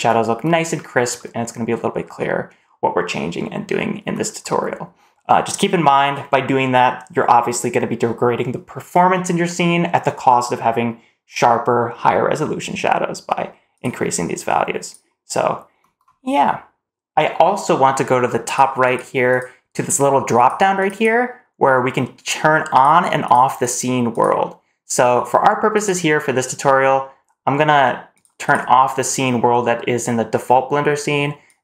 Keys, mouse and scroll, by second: 1.0 middle click, 13.6 click, 18.3 click, 18.7 click, 20.2 click, 20.8-31.6 drag.